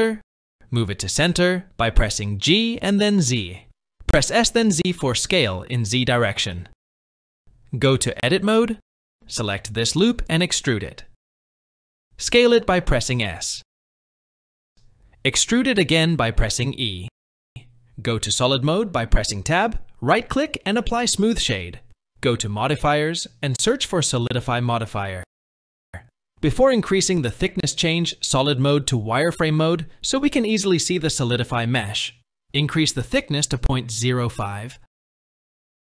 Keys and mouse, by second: 1.3 g, 4.5 s, 7.4 Tab, 8.4 alt+click, 10.9 e, 12.0 shift+middle click, 13.1 e, 14.4 s, 14.7 e, 18.8 Tab, 21.1 right click, 24.2 click, 24.9-26.8 drag, 29.7-31.9 drag, 32.4 click, 32.9 click.